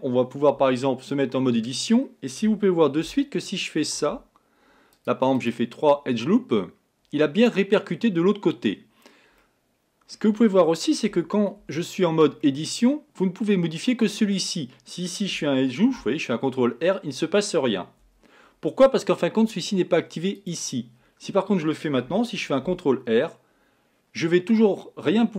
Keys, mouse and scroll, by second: 0.6 Tab, 1.1-3.0 middle drag, 3.0 ctrl+r, 6.3-7.4 middle drag, 7.4-9.4 scroll up 1, 9.4-11.1 middle drag, 11.1 Tab, 11.6 Tab, 12.4-15.4 middle drag, 15.9 ctrl+r, 20.4 click, 22.7 ctrl+r.